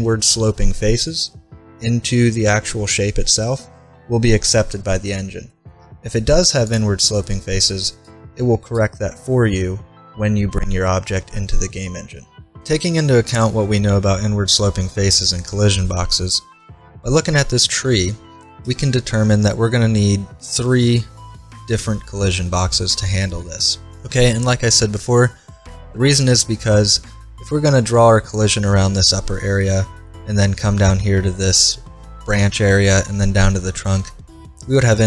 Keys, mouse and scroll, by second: 5.7-9.1 middle drag, 6.7-8.4 drag, 11.2-12.5 middle drag, 18.7-20.3 middle drag, 24.8-31.5 middle drag.